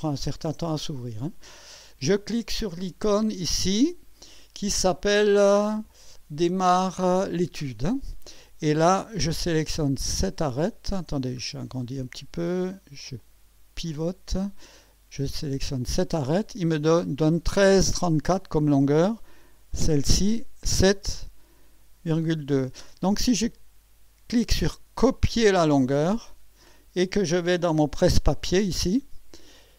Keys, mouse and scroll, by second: 7.6 click, 11.3 scroll up 1, 11.8-12.4 right drag, 13.2 right click, 13.9-14.7 drag, 15.8 click, 19.7 click, 25.6 click, 28.9 click.